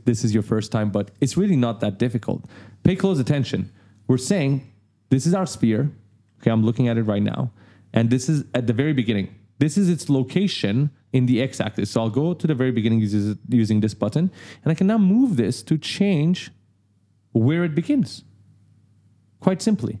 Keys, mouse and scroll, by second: 3.5 click, 4.5-7.2 typing, 4.6 right click, 5.4 right click, 8.7 click, 12.6 click, 15.5 click.